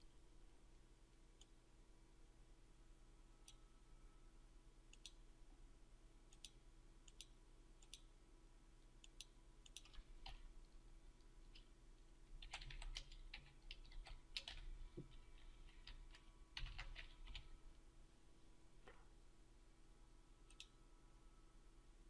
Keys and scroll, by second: 16.4 ctrl+F5.